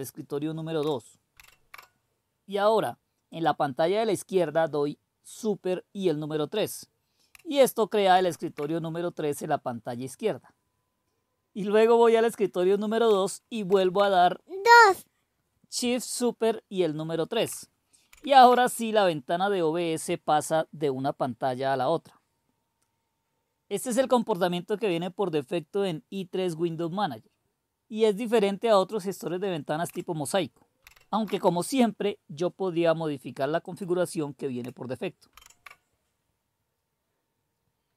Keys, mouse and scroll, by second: 1.3 super+", 3.3-4.9 drag, 8.1 super+3, 13.6 super+2, 18.1 super+·, 30.8 super+", 33.6-35.3 drag, 35.3 super+1.